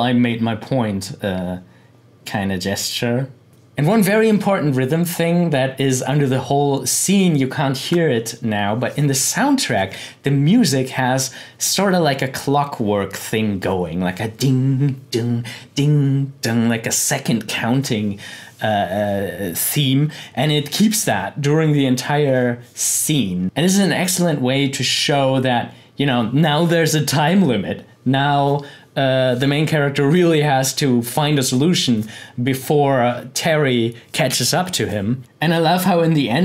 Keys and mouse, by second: 35.2 click.